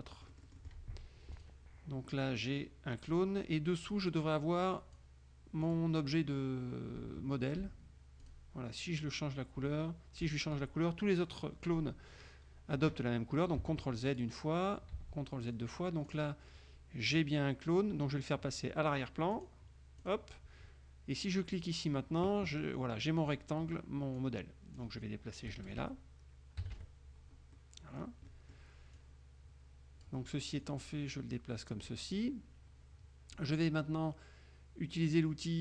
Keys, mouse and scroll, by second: 0.4 middle click, 0.4 click, 1.5 click, 4.0 click, 4.8 click, 5.8 click, 8.4 click, 13.7 ctrl+z, 14.2 ctrl+click, 15.1 ctrl+z, 15.6 ctrl+click, 16.2 click, 19.4 click, 20.1 click, 21.6 click, 24.3 click, 25.6 KP_Subtract, 26.7 KP_Subtract, 27.6-28.3 scroll up 1, 29.1-30.4 drag, 30.8-32.2 drag.